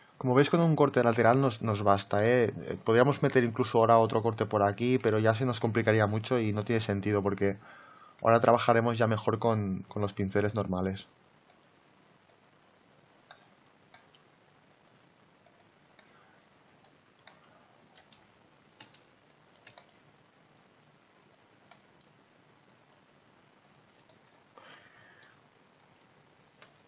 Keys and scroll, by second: 5.2 ctrl+z, 18.2 space.